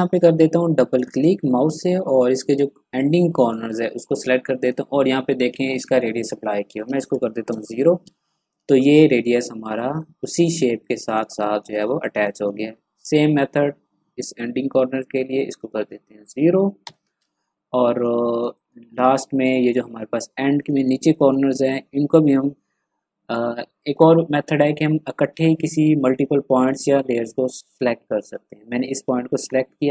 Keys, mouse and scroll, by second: 0.9 click, 3.3 click, 7.4 Return, 8.5 click, 10.8 click, 11.2 space, 11.4 click, 11.7 space, 11.7 click, 11.8 space, 13.0 click, 16.8 Return, 17.7 click, 18.2 ctrl+scroll down 1, 18.4 space, 18.5 click, 19.0 ctrl+scroll down 1, 19.2 ctrl+space, 19.3 click, 19.9 ctrl+scroll up 1, 20.6 click, 21.0 space, 21.1 click.